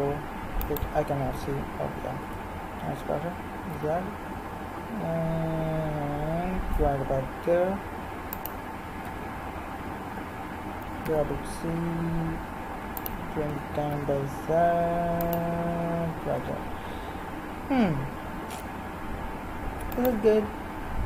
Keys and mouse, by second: 0.9 z, 2.3 r, 9.1 z, 10.8 g, 13.5 g, 19.9-21.0 right drag.